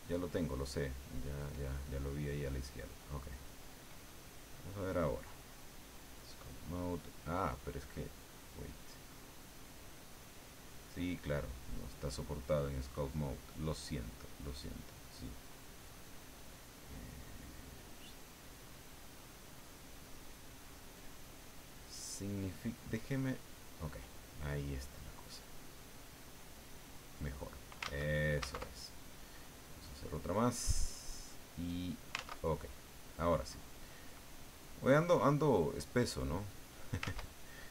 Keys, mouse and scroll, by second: 4.5-6.3 drag, 11.1 click, 14.7 click, 15.4 click, 16.3 click, 16.9 click, 17.6 click, 19.4 click, 23.3 click, 24.5-27.6 drag, 27.8 ctrl+z, 29.8 click, 30.7-32.0 drag, 32.1 ctrl+z, 32.6 ctrl+middle click, 34.0 click, 35.2 click, 36.1 click, 37.0 ctrl+z.